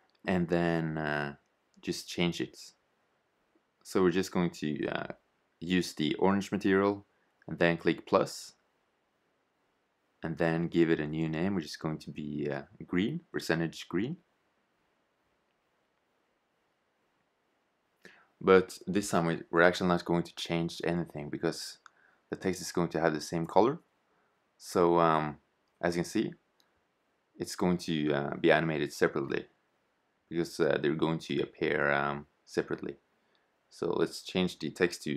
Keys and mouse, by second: 0.1-3.1 drag, 8.2-11.7 drag, 12.5-13.5 typing, 15.6 r, 18.9 e, 24.3-26.2 drag, 29.5 shift+z, 30.7 Tab, 31.5 Left, 32.4 BackSpace, 32.5 BackSpace, 32.8 2, 32.9 4, 33.7 Tab.